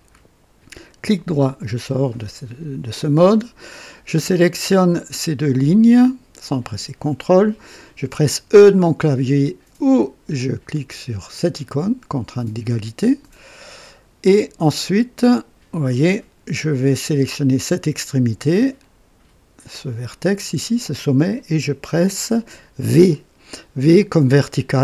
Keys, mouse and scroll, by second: 0.8 right click, 4.9 click, 6.6 click, 11.6 e, 15.8-17.1 drag, 17.2 click, 20.2 click.